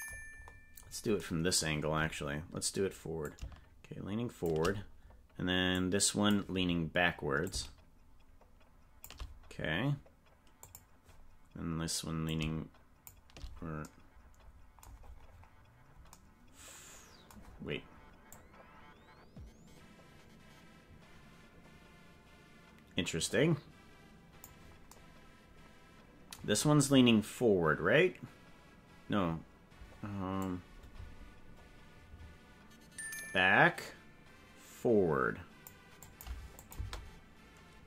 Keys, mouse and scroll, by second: 0.4-1.0 scroll up 8, 3.2-4.4 shift+drag, 5.8 click, 7.4-9.0 shift+drag, 10.6 click, 12.3 shift+click, 15.0-15.4 scroll down 7, 18.3 click, 30.4-31.4 drag, 36.0 click, 36.6 click, 36.7 space.